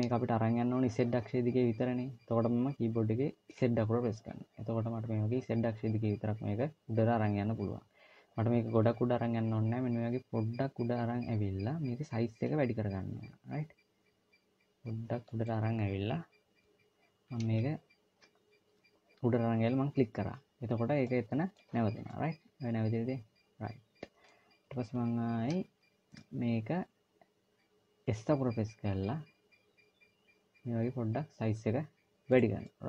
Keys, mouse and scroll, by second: 20.9 middle click, 21.9 middle click, 24.7 KP_1, 27.9 s, 32.5 middle click.